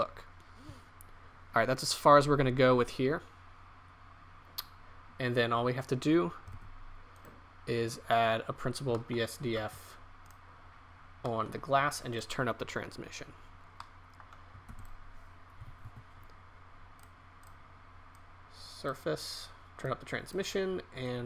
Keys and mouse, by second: 5.4-6.5 middle drag, 6.7 shift+z, 10.3 drag, 12.9 Delete, 18.1 shift+a.